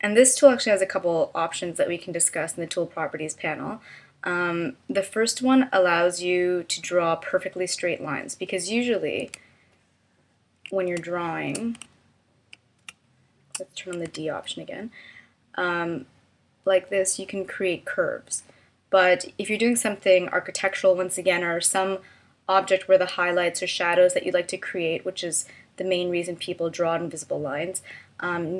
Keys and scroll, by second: 11.0 space, 12.9 space, 14.1 d.